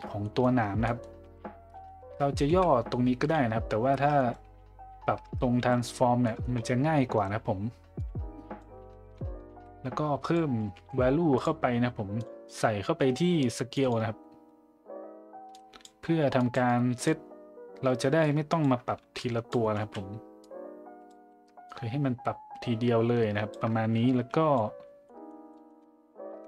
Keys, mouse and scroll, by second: 0.2 middle click, 0.8 middle click, 6.3 middle click, 8.1 click, 9.5 shift+a, 13.0-13.7 drag, 13.8 click, 15.5 click, 16.7-17.1 drag, 18.2 click, 19.0 ctrl+z, 19.2 click, 19.8 ctrl+z, 20.4 click, 21.7-23.6 shift+drag, 24.0 click, 25.1 middle click, 25.5 middle click.